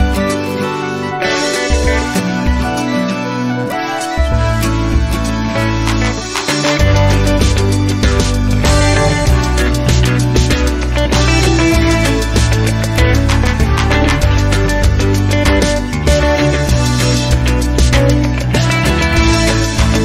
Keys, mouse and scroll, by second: 1.1 click, 2.0 click, 3.3 middle click, 3.7 0, 4.4 scroll down 2, 5.1 click, 7.2 0, 10.7 click, 12.0-12.3 scroll down 2, 13.1 click, 14.1 click, 14.7-15.6 typing, 16.7 click, 17.1 2, 17.4 0, 18.8 click, 19.2-20.0 typing.